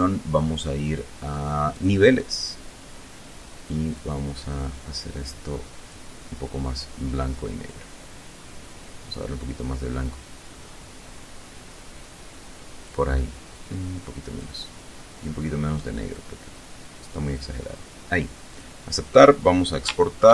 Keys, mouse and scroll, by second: 1.2 click, 3.4-5.5 drag, 7.1-12.5 drag, 13.0 click, 15.5-17.0 drag, 17.9 click, 19.7 ctrl+shift+e.